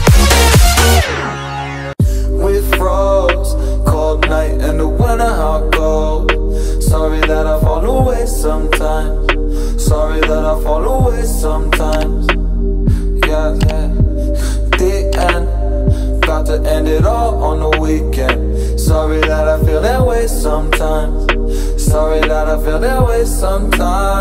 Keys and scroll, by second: 1.3 space, 1.9 space, 2.3 space, 6.4 ctrl+].